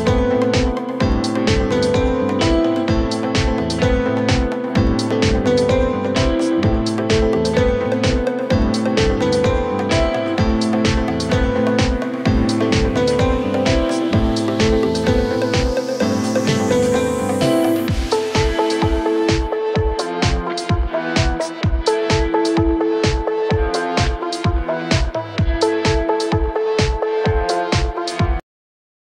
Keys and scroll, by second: 0.2 F3, 1.8 shift+F2, 2.3 F9.